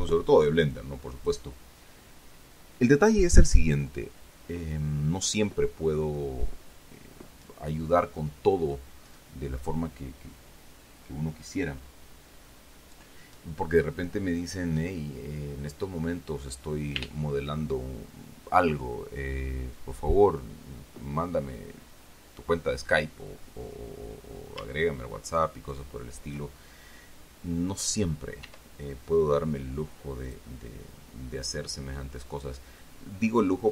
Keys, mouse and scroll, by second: 1.1 click, 25.9 shift+right click, 28.8 e, 30.6 click.